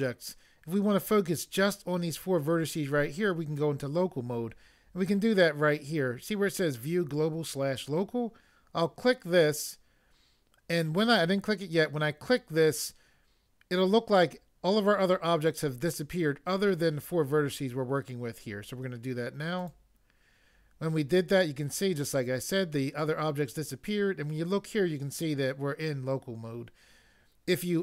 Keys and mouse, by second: 19.6 click.